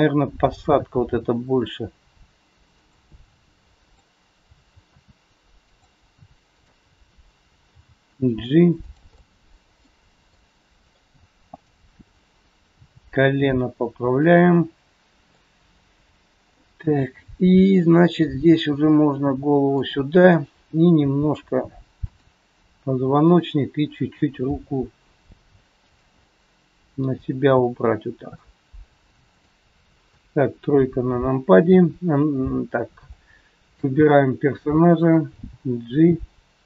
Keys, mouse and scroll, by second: 0.4 click, 0.9 g, 3.8 click, 4.8 r, 6.4 click, 7.7 g, 9.1 middle click, 11.4 middle click, 11.4 click, 12.7 g, 15.4 middle click, 17.7 click, 18.4 g, 20.2 click, 20.9 g, 23.3 click, 24.4 g, 26.2 middle click, 28.0 scroll down 1, 28.3 middle click, 30.0 KP_3, 33.0 click, 35.3 g.